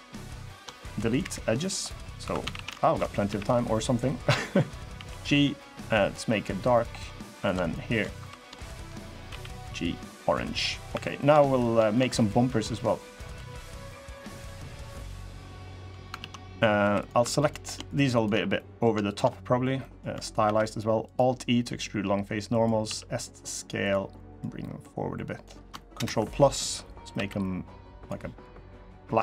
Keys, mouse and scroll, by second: 0.2 shift+click, 1.0 Delete, 1.6 middle click, 2.0 2, 2.2 a, 2.3 a, 2.5 alt+shift+click, 3.0 f, 3.4 middle click, 3.7-4.2 scroll down 4, 4.7 g, 6.2-6.8 scroll up 4, 6.5 middle click, 7.1 click, 7.4 shift+click, 7.9 3, 8.1 click, 8.4 shift+click, 9.0 g, 10.4 scroll down 2, 10.7 3, 10.9 click, 11.2 click, 11.9 click, 12.5 middle click, 12.8-13.5 scroll up 3, 13.0 2, 13.5-14.0 scroll down 1, 14.0 click, 14.0 scroll down 1, 14.3 middle click, 14.9 click, 15.9 ctrl+z, 16.6 3, 16.7 click, 17.1 shift+click, 17.6 click, 17.9 shift+click, 18.3 middle click, 18.8 shift+click, 19.0 scroll down 2, 19.5 middle click, 20.2 alt+e, 22.6 s, 24.1 click, 25.7 ctrl+KP_Add, 26.9 g, 28.2 click, 28.6 middle click, 29.1 middle click.